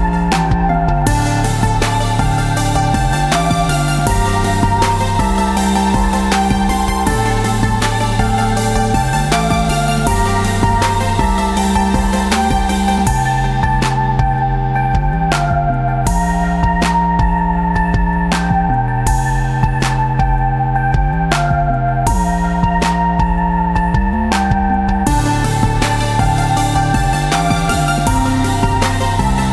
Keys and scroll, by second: 4.1 v, 5.6 ctrl+-, 6.3 ctrl+v, 7.7 Tab, 11.9 Tab, 17.0 v, 19.5 ctrl+shift+], 19.9 ctrl+shift+[, 21.1 2, 21.6 a, 23.3 space, 25.3 ctrl+a, 27.1 ctrl+KP_6, 28.8 Tab.